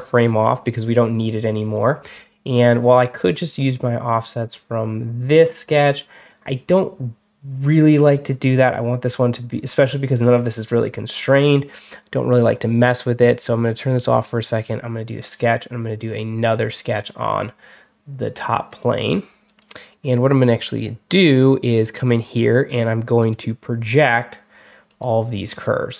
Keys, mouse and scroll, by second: 0.4 click, 0.8 click, 1.5 click, 13.5 click, 14.4 click, 15.4 click, 18.5 click, 19.3 click, 21.7 click, 23.1 click, 24.7 click, 25.4 click.